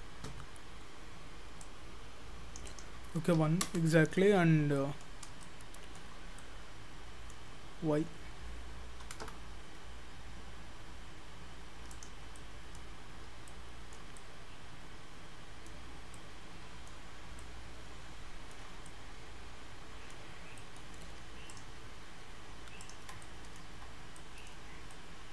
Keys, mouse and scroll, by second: 1.7 click, 2.7 click, 4.3-4.8 scroll down 9, 4.8 middle click, 5.2 scroll up 3, 5.5 shift+middle click, 6.4 middle click, 9.1 g, 12.4 middle click, 12.9-13.5 scroll up 4, 13.5 shift+middle click, 14.2 middle click, 15.9 scroll up 3, 16.2 middle click, 17.2 scroll up 2, 17.4 shift+middle click, 18.9 middle click, 20.6 middle click, 21.5 shift+click, 23.2 middle click, 24.0-24.5 scroll down 4, 24.2 middle click, 24.7 scroll down 2, 24.9 middle click.